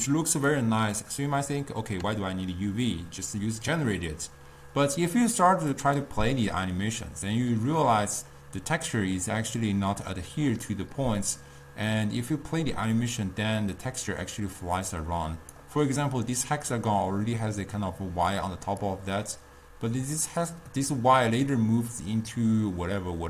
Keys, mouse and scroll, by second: 0.0-13.1 drag, 19.2-22.4 drag.